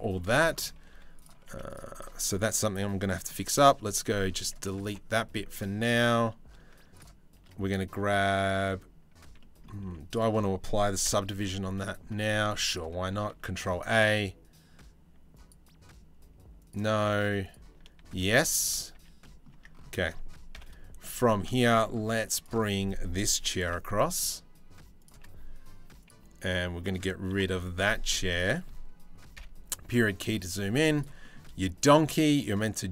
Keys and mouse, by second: 0.5 1, 0.8 click, 1.0 z, 3.0 c, 4.4 Delete, 5.5 Tab, 8.0 click, 9.0 drag, 9.4 z, 10.7 KP_Decimal, 11.3 middle click, 12.3 click, 12.8 ctrl+a, 13.4 click, 15.0 click, 16.2 click, 17.1 click, 17.7 ctrl+a, 18.2 Tab, 18.5 a, 18.8 click, 19.2 Tab, 20.1 KP_7, 21.2 shift+click, 21.6 z, 23.2 g, 25.7 click, 27.0 Delete, 27.9 click, 28.9 KP_Decimal, 29.5-29.8 drag, 30.3 z, 30.9 drag, 31.4 shift+click.